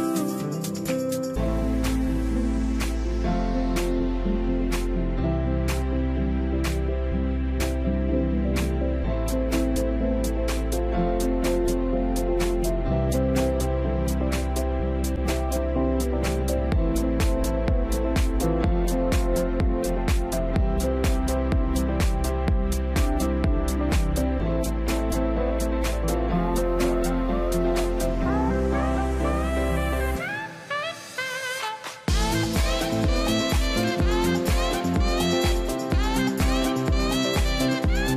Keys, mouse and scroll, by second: 4.1 scroll down 1, 4.2 double click, 4.5 middle click, 4.7 scroll up 1, 5.2 middle click, 5.7-6.3 scroll down 1, 6.3 Escape, 6.5 middle click, 7.7 scroll up 1, 8.1 scroll down 1, 8.5 middle click, 9.0-9.5 scroll down 2, 10.1 scroll down 1, 11.6 shift+middle click, 12.8 shift+middle click, 13.9 scroll up 1, 16.1 middle click, 16.9 scroll down 1.